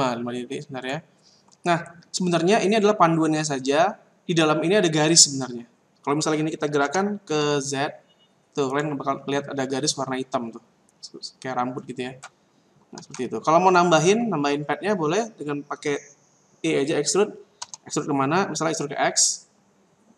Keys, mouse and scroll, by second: 0.8 right click, 6.8 g, 8.7 click, 9.6 scroll up 5, 10.4 scroll down 2, 12.9 ctrl+z, 14.3-16.0 scroll down 1, 16.0-16.7 scroll down 2, 17.6 e.